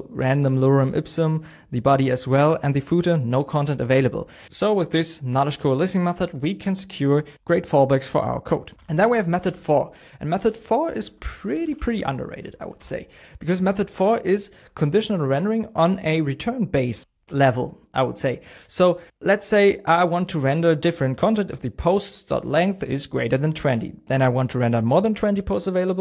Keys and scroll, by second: 8.8 super+p, 10.4 BackSpace, 12.8 Down, 14.7 super+s.